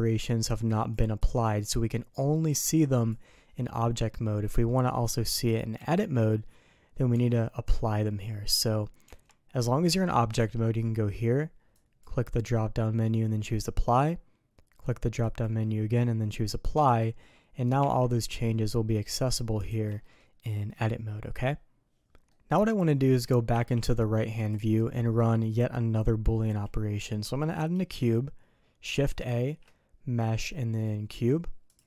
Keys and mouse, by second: 0.6 click, 1.2 click, 2.6 click, 3.0 click, 5.7 Tab, 7.1 Tab, 9.0 Tab, 11.7-13.8 drag, 15.2-16.7 drag, 17.7 Tab, 18.5 middle click, 19.6 alt+a, 20.0 click, 22.0 Tab, 22.2 click.